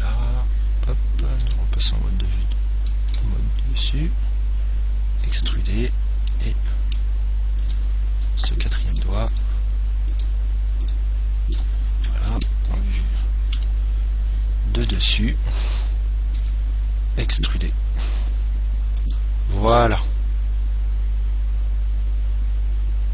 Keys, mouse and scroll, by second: 0.0 KP_1, 1.7 KP_7, 3.3 e, 5.9 click, 6.6-8.4 middle drag, 8.0-13.4 right drag, 12.6 KP_3, 13.9 KP_1, 15.2 KP_7, 16.7 e, 19.5 click, 20.1-21.9 middle drag.